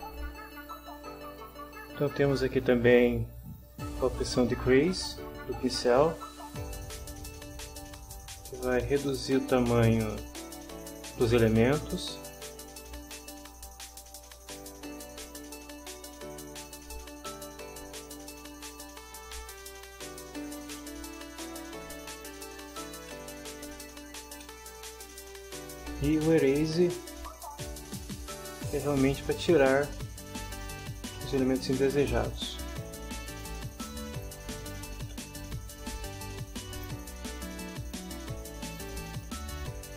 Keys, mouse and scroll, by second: 0.5 scroll up 1, 1.6-2.8 middle drag, 4.6 click, 6.7-8.2 right drag, 8.5 shift+middle click, 9.6-10.0 scroll up 2, 10.0-12.7 right drag, 13.8 click, 14.3-18.6 right drag, 18.6-19.3 scroll up 2, 19.5 middle click, 20.1 shift+scroll up 1, 20.2 shift+middle click, 20.8-21.1 shift+scroll up 1, 21.1-23.1 shift+middle drag, 23.1 shift+scroll up 1, 23.2-23.6 shift+scroll down 1, 23.6 scroll up 1, 23.9 shift+middle click, 24.6-24.9 shift+scroll down 2, 26.4 click, 27.2 middle click, 28.2-29.8 drag, 30.2-31.9 middle drag, 32.1-34.5 drag, 34.7 shift+middle click, 35.3-36.2 shift+scroll down 2, 36.8 middle click, 37.6-38.0 scroll down 1, 38.0-39.0 middle drag, 39.0-39.9 scroll up 1.